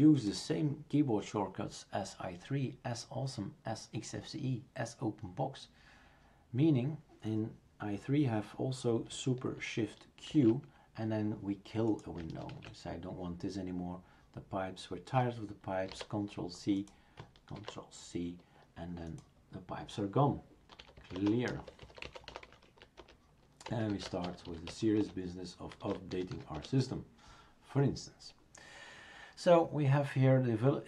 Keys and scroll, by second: 10.3 shift+super+q, 12.5 shift+super+q, 15.9 ctrl+c, 17.6 ctrl+c, 20.5-26.8 typing.